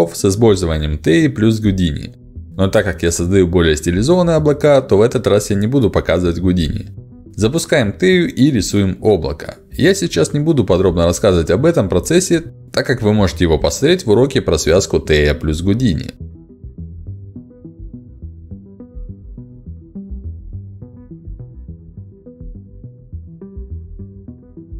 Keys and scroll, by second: 20.5 ctrl+z, 21.1 ctrl+z.